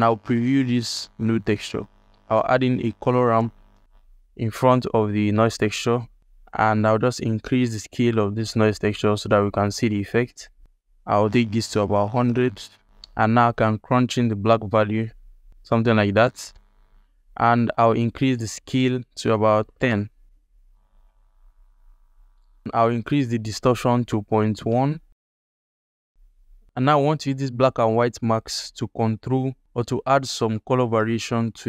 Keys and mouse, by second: 1.0 ctrl+click, 1.6 alt+click, 2.0 shift+a, 6.3 ctrl+alt+click, 7.1-10.6 drag, 11.0-12.2 drag, 12.0 KP_0, 12.8 ctrl+alt+click, 13.7-16.2 drag, 16.5 alt+shift+middle drag, 17.6-19.9 drag, 21.0-22.1 ctrl+drag, 22.9-24.7 drag, 25.7 click, 27.0-27.4 ctrl+alt+middle drag, 28.0 drag, 29.0 g, 30.5 g, 31.5-31.6 drag.